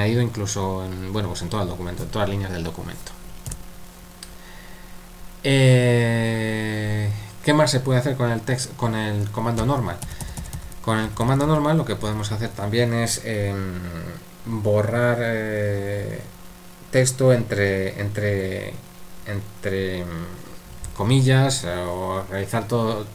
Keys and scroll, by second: 3.5 u, 10.0-12.1 typing.